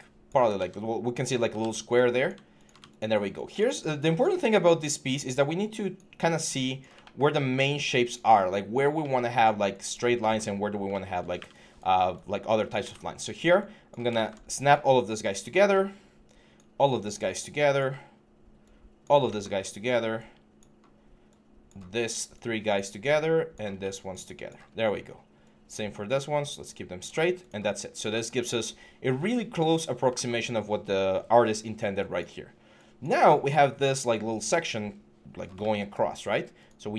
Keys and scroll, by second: 0.3 ctrl+z, 1.4 ctrl+z.